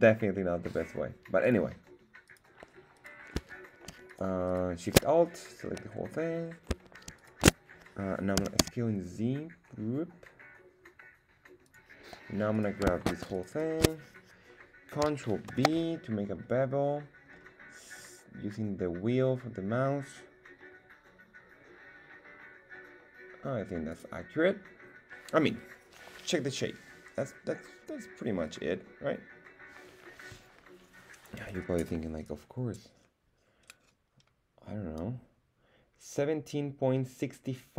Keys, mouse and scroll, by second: 2.3 right click, 2.9 right click, 4.1 alt+shift+right click, 4.5 alt+shift+right click, 5.7 middle click, 7.1 alt+shift+right click, 8.3 s, 8.6 z, 11.6 click, 12.5 right click, 13.3 alt+shift+right click, 13.5 alt+shift+right click, 15.6 ctrl+b, 17.3-18.2 scroll up 4, 23.9 click.